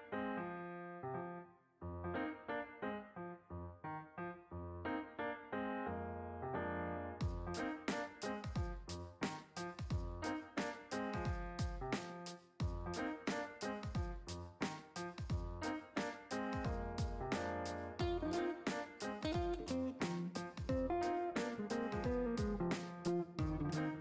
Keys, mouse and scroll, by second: 2.1 click, 4.8-10.6 drag, 12.0 click, 14.2-19.7 drag, 21.6-22.7 shift+middle drag, 23.5-24.0 middle drag.